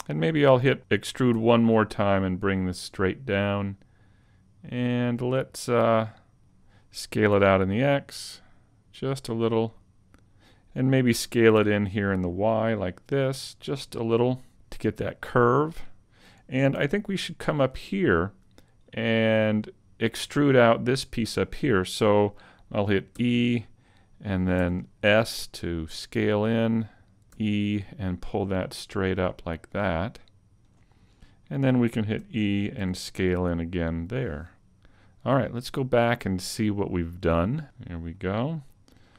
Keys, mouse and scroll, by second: 1.4 e, 6.4 click, 7.4 s, 10.4 click, 10.6 right click, 10.6 s, 11.1 s, 13.8 click, 14.5 a, 17.4 alt+right click, 18.8 click, 23.2 e, 23.5 click, 24.6 s, 25.7 s, 27.2 click, 27.4 e, 27.6 click, 28.6 click, 32.2 e, 32.5 click, 32.8 s, 34.2 click, 36.0 click, 37.3 click, 38.2 middle click, 39.0 shift+middle click.